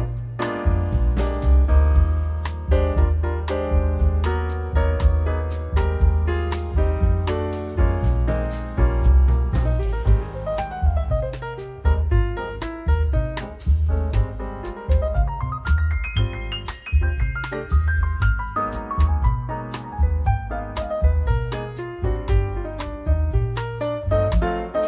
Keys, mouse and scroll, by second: 2.5-5.9 drag, 6.0-8.0 drag, 8.3 click, 9.3-10.1 drag, 10.6 1, 13.8 click, 15.3 click, 16.5-16.9 scroll up 1, 17.2-17.5 scroll down 3, 18.1-19.6 drag, 19.8-22.0 drag, 22.4 click, 23.6-24.8 drag.